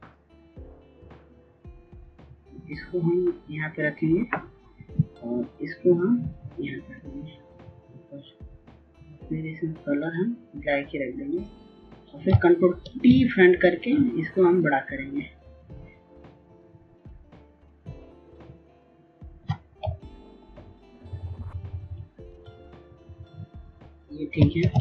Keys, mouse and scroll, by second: 2.6-9.3 drag, 15.6 ctrl+t, 17.1 shift+click, 22.7 Up, 23.4-24.8 typing.